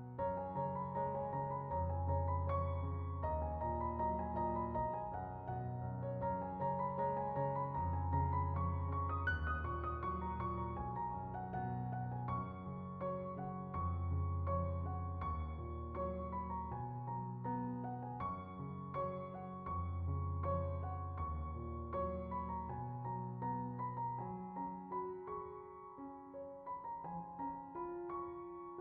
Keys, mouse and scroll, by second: 0.9-2.0 middle drag, 3.0 middle click, 4.7 click, 6.9 click, 7.5 scroll, 9.7 click, 10.1 ctrl+right click, 11.1-12.8 middle drag, 13.4-14.6 middle drag, 15.8-17.2 middle drag, 17.6 right click, 17.9 middle click, 18.7 click, 19.4 shift+click, 19.7 x, 20.1 middle click, 21.0 middle click, 21.3 click, 21.9 shift+click, 22.4 BackSpace, 22.9 x, 23.6 click, 24.6 middle click, 25.3 click, 25.6 x, 26.0 middle drag, 26.3 drag, 27.2 click.